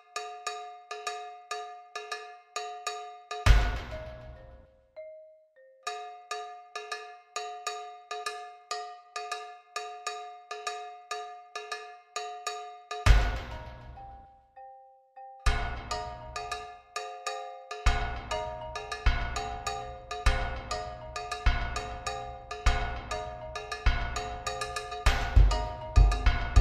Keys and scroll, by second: 1.6 ctrl+t, 7.7 alt+shift+Return, 23.2 ctrl+u.